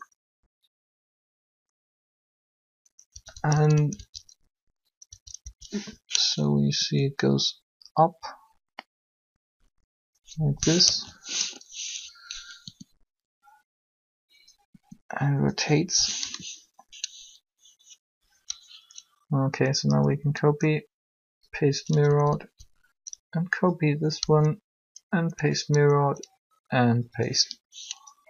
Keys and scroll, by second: 3.1 Right, 5.4 Left, 6.7 r, 10.6 1, 12.6 r, 14.7 r, 16.1 7, 20.0 Up, 22.1 Down, 24.2 Up, 25.9 Up.